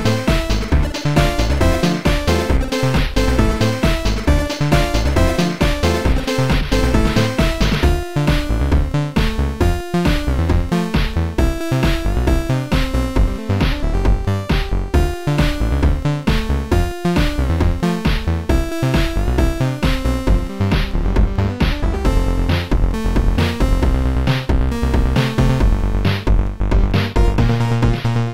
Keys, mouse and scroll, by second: 0.2 click, 3.3 click, 3.9 click, 5.6 click, 6.0 click, 6.3 click, 9.1 click, 11.9 click, 13.5 click, 16.0 click, 17.2 click, 19.7 click, 20.7 click, 21.6 click, 23.7 right click, 23.7 click, 25.5 click, 26.1 click, 26.1 right click, 27.2 click, 28.0 click.